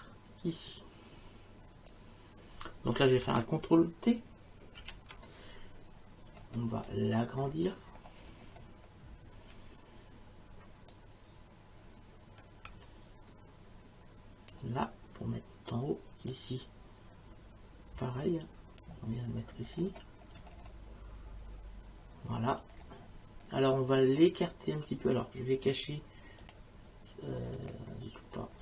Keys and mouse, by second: 4.8 ctrl+t, 10.9 shift+click, 12.7 click, 16.3 click, 26.4 click, 27.6 click.